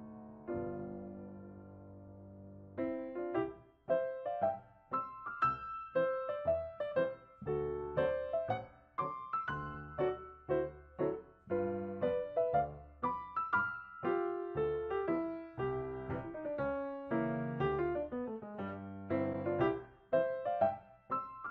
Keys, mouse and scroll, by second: 2.5 ctrl+shift+click, 2.5 ctrl+shift+click, 3.8 ctrl+click, 8.9 ctrl+click, 11.1 ctrl+click, 12.7 ctrl+click, 17.5 shift+scroll down 2, 18.1-19.0 shift+scroll down 1, 19.7 ctrl+shift+e.